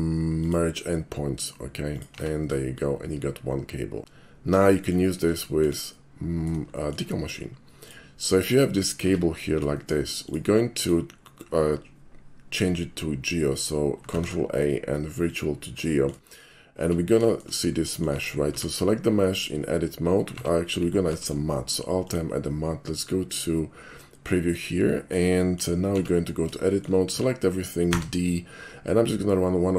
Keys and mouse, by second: 0.4 click, 1.9 click, 2.2 Tab, 2.7-4.0 middle drag, 4.6 middle drag, 5.5 shift+middle click, 6.0-6.5 shift+middle drag, 6.8-8.1 shift+middle drag, 8.7 shift+middle drag, 9.1 Tab, 9.8 shift+middle click, 10.2 shift+click, 10.8 shift+click, 14.2 ctrl+a, 15.3 click, 15.9 middle click, 16.3 shift+middle click, 16.9 Tab, 17.3 shift+middle click, 17.8 shift+middle click, 18.2 Tab, 18.5 a, 19.3 middle click, 20.4 Tab, 21.1 alt+m, 22.1 click, 23.3 click, 24.5 middle drag, 25.0 middle click, 25.4 shift+middle click, 26.0 Tab, 26.7 shift+middle click, 27.2 a, 28.0 d.